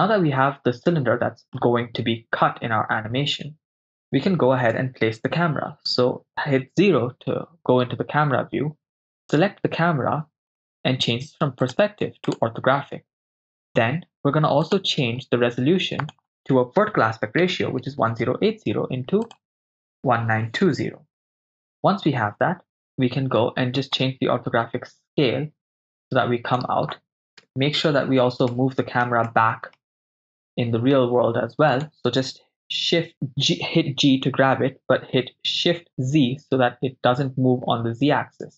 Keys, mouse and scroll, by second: 0.1-1.6 middle drag, 4.7 KP_0, 9.4 right click, 10.5 click, 11.7-12.5 drag, 13.4 click, 14.7 click, 16.0-18.2 drag, 19.2-20.7 drag, 22.8 click, 24.0-26.7 drag, 27.5 KP_0, 28.5 ctrl+middle click, 29.3 middle click, 30.2-31.0 middle drag, 31.8 right click, 33.4 g, 36.0 shift+z.